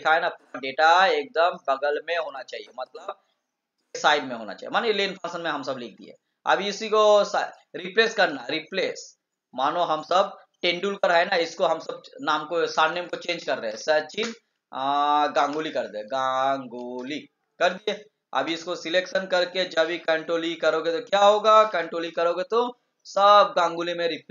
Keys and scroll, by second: 5.5 ctrl+v, 22.2 ctrl+e.